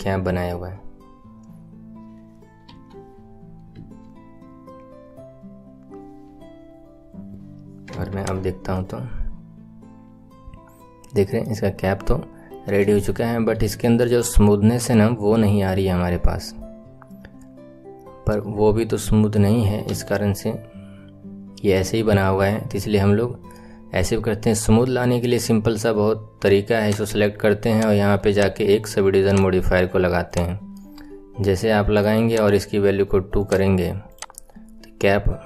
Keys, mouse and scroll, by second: 2.6 KP_7, 3.2-3.9 scroll up 4, 7.9 Tab, 8.1 click, 8.4 scroll down 4, 8.7-9.5 middle drag, 10.1 middle drag, 10.3 middle drag, 10.6-11.6 middle drag, 11.6 scroll up 5, 12.4-12.7 scroll down 1, 12.7-13.3 shift+middle drag, 13.3 scroll up 3, 13.6-14.3 shift+middle drag, 14.5 middle click, 14.7-15.3 middle drag, 15.4 middle drag, 15.9-16.3 middle drag, 16.4 middle click, 16.7 middle click, 16.7-17.1 middle drag, 19.8 KP_1, 20.2-23.5 scroll down 5, 23.5 middle click, 24.2-26.0 scroll up 3, 26.7 click, 27.7 click, 28.3-30.3 drag, 30.7-32.2 middle drag, 32.2 click, 33.3-34.1 drag, 34.3-35.4 middle drag.